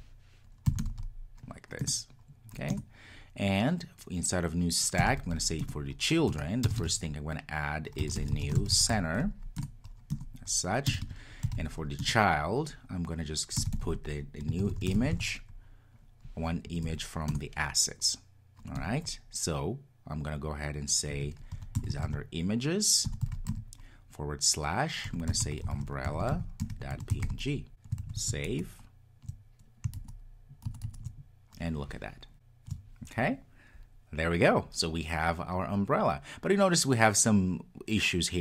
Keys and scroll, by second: 1.9 Return, 17.4 Return, 28.1 super+s.